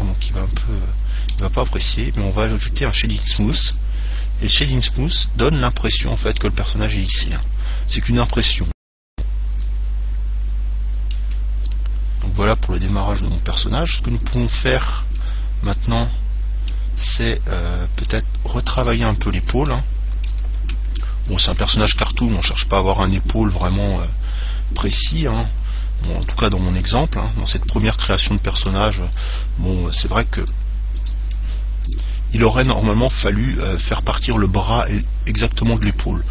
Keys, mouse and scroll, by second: 0.5 KP_1, 1.5 KP_3, 3.9 click, 5.6-10.3 middle drag, 15.4 Tab, 16.3-21.7 middle drag, 18.0-18.4 scroll up 1, 21.8 ctrl+Tab, 23.3 right click, 23.9-25.7 middle drag, 26.9 g, 28.7 click, 29.4 g, 29.8 middle click, 31.1-34.1 drag, 31.3 right click, 31.3 g, 32.9-35.9 middle drag, 36.1-36.3 middle drag.